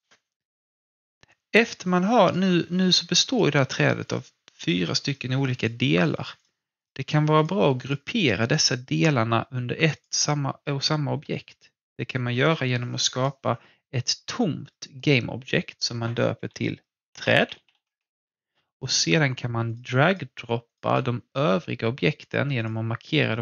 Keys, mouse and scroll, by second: 0.9 click, 1.2-1.6 scroll down 1, 1.2 typing, 1.7-3.2 alt+drag, 13.1 click, 16.8-18.2 typing, 19.7 click, 20.7-23.4 shift+drag.